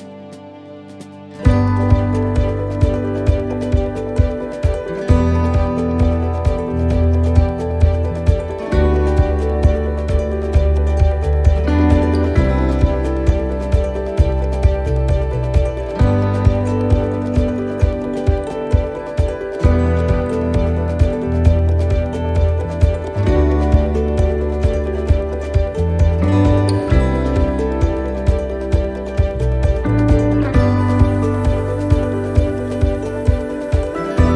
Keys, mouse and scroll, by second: 0.9 middle click, 1.7 scroll up 2, 2.0 middle click, 3.0 scroll down 1, 3.3 middle click, 3.9 middle click, 4.6 scroll up 1, 6.6 click, 7.0 middle click, 8.3 right click, 8.7 shift+right click, 9.0 middle click, 10.3 e, 11.6 middle click, 11.9 scroll down 2, 13.1 ctrl+r, 18.4 middle click, 18.8-19.2 scroll down 3, 19.2 middle click, 19.8 shift+middle click, 20.2-20.6 scroll up 2, 21.0 middle click, 22.8 right click, 23.1 middle click, 24.5 click, 25.7 click, 32.5 middle click.